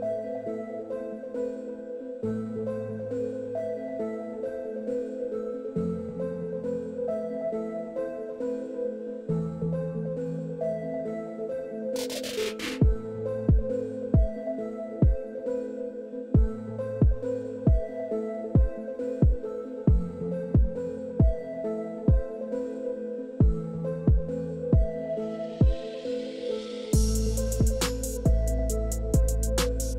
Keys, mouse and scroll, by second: 3.4 click, 8.1 click, 16.5 click, 20.1 click, 29.5 click.